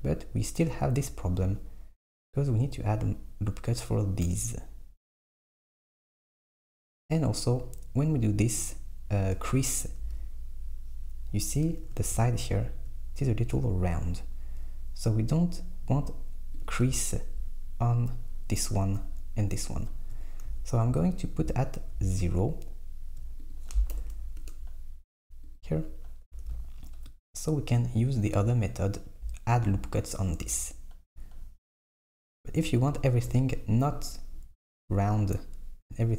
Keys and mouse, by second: 1.3 Tab, 8.8-10.0 middle drag, 10.0 KP_1, 11.9 alt+z, 16.6 click, 20.5 z, 20.9 z, 21.4 z, 22.0 z, 23.5-25.6 drag, 26.3 Tab.